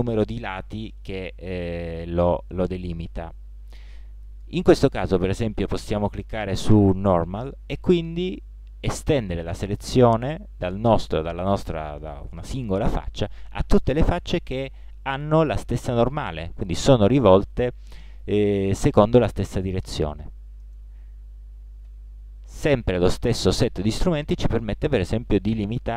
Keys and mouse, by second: 14.2-15.1 middle drag, 21.8 shift+g.